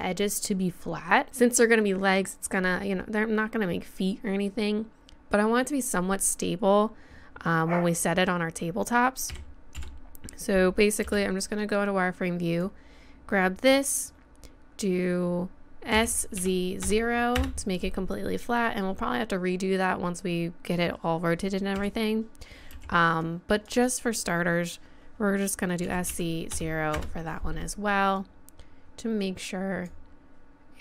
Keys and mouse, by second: 9.3 a, 9.8 z, 11.0 b, 15.9 s, 21.8 a, 22.7 b, 23.5-25.3 drag, 25.8 s, 28.2-30.2 drag.